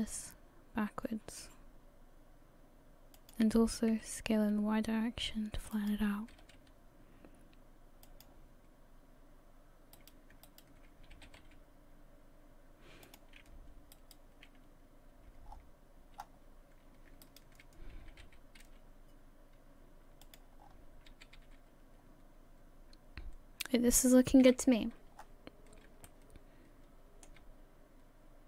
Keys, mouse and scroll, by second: 3.9 s, 6.3 g, 8.8-9.5 scroll up 1, 10.0 right click, 10.5 shift+right click, 11.1 g, 13.9 right click, 15.5-16.2 scroll down 6, 16.2-16.9 scroll up 5, 17.2 shift+right click, 18.1 g, 20.6 scroll down 5, 21.1 a, 21.4 a, 22.0-23.8 scroll down 1, 24.5 KP_1, 25.2 scroll up 2, 26.1 shift+middle click, 26.1 scroll up 3.